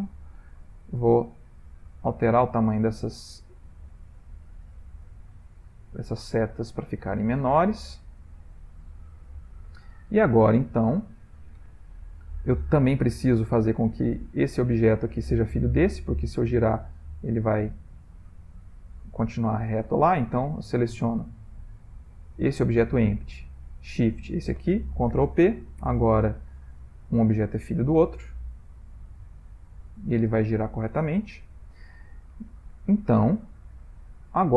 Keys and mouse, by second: 0.8 click, 1.5 click, 3.9 middle click, 4.5-5.0 ctrl+middle click, 4.7 middle click, 4.9 middle click, 5.3-5.8 shift+middle click, 5.5 ctrl+middle click, 5.8 ctrl+middle click, 6.1 ctrl+middle click, 6.4 ctrl+middle click, 6.5 shift+middle click, 8.1 click, 10.1 shift+middle click, 10.8 ctrl+middle click, 11.8 shift+middle click, 13.3 click, 14.6 click, 15.9 click, 16.4 r, 20.7 click, 24.1 shift+click, 25.2 ctrl+p, 27.2 click, 27.8 r, 31.5 ctrl+z, 32.3 ctrl+middle click, 32.7 ctrl+middle click, 33.2 shift+middle click, 33.8 ctrl+middle click.